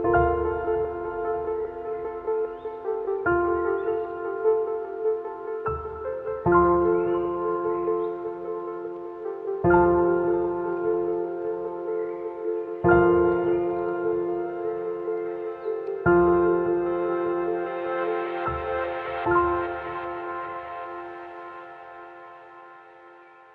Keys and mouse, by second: 0.4 alt+shift+click, 0.9 alt+shift+click, 1.3 alt+shift+click, 1.9 alt+shift+click, 2.6 alt+shift+click, 3.3 alt+shift+click, 4.0 alt+shift+click, 4.5 shift+middle click, 4.9 middle click, 5.9 alt+shift+click, 6.4 alt+shift+click, 7.0 alt+shift+click, 7.7 alt+shift+click, 8.5 alt+shift+click, 9.1 alt+shift+click, 9.5 middle click, 9.7 x, 10.8 shift+middle click, 11.6 middle click, 12.0 Tab, 13.9 h, 14.5 shift+middle click, 14.8 ctrl+s, 15.2-15.7 shift+middle drag, 16.0 click, 16.6 KP_Divide, 17.1 Tab, 17.7 shift+click, 18.6 click, 19.6 alt+shift+click, 20.5 alt+shift+click, 21.5-23.5 middle drag.